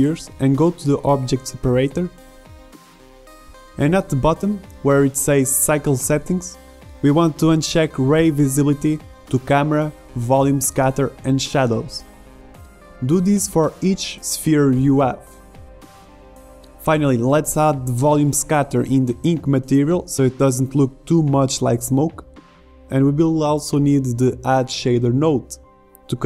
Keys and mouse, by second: 0.5 z, 3.9-9.5 drag, 10.9-12.0 right drag, 12.0 middle click, 12.8 right click, 15.0 right click, 16.8 shift+a.